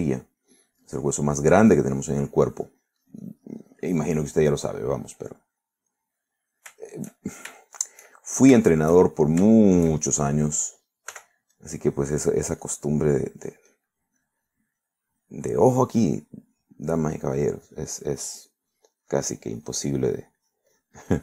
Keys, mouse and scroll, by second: 0.7-1.7 middle drag, 1.9-5.0 drag, 5.0-7.8 middle drag, 7.9-9.2 shift+middle drag, 9.7 shift+middle click, 12.2 f, 12.6 click, 13.0-15.0 drag, 15.3 click, 15.9-16.9 drag, 18.0-19.5 drag, 20.1 click, 20.7 middle click.